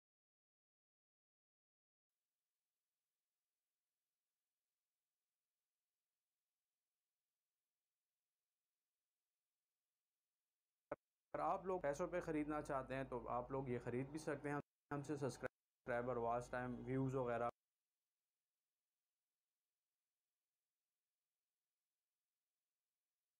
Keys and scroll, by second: 9.5 space, 11.7 space, 14.9 space, 17.8 space, 19.2 c.